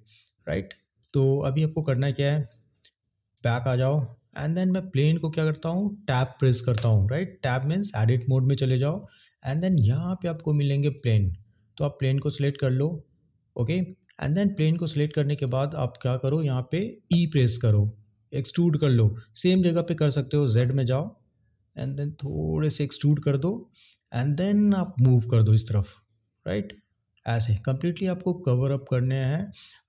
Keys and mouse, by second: 0.9 click, 1.9 click, 3.3 click, 4.9 click, 10.9 click, 12.3 click, 15.4 click, 23.0 click.